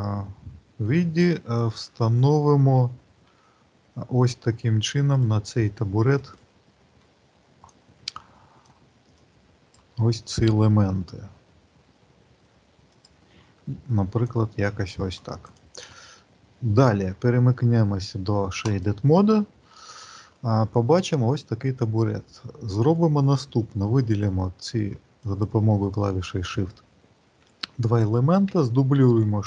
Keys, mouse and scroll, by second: 1.5 click, 3.1 g, 6.0 click, 7.6 click, 9.0 click, 10.7 g, 14.1 click, 15.4 click, 16.1 middle click, 18.5 click, 20.1 middle click, 24.0 click, 25.1 shift+click, 28.9 shift+d.